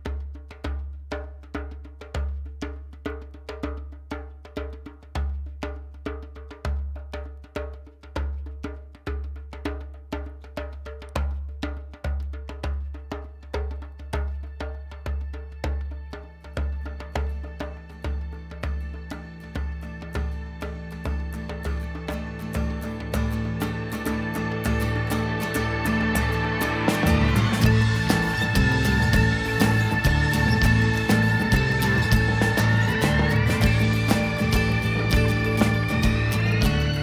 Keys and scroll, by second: 21.9 super+=.